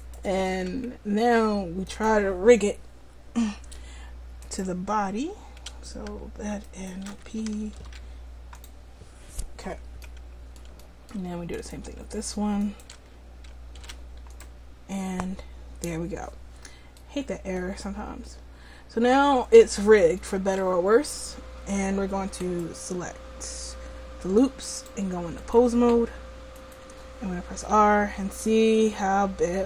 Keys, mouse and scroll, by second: 0.0 w, 0.4 Tab, 7.8 ctrl+p, 13.8 ctrl+p, 22.4-24.0 right drag, 24.8-28.9 drag, 27.6 r.